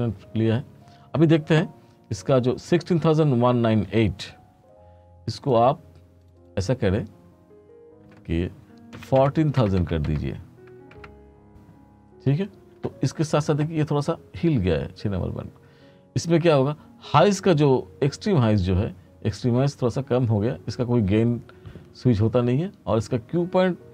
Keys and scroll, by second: 8.8-10.2 typing, 11.0 Return.